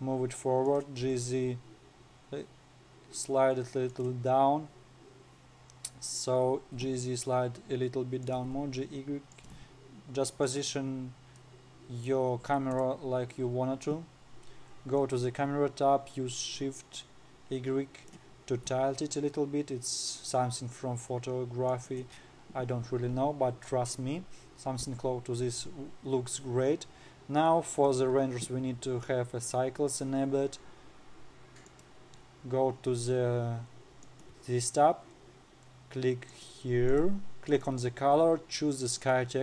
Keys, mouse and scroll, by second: 1.6 g, 5.5-6.8 scroll down 9, 6.8-7.3 scroll up 2, 7.3 g, 8.9 g, 11.4-11.9 scroll up 5, 11.9-12.9 middle drag, 12.9 scroll up 2, 13.3 KP_0, 15.5 click, 17.1-19.1 drag, 19.1 g, 27.0-28.3 scroll up 4, 28.3 click, 32.2 click, 34.6 click, 36.8 click.